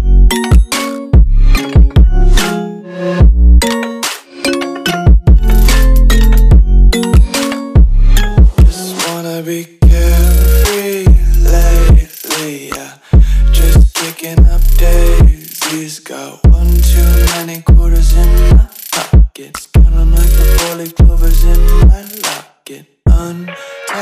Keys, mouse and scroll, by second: 0.4 click, 1.8 ctrl+s, 8.7 click, 12.0 click, 14.0 Delete, 15.2 Return, 18.3 click.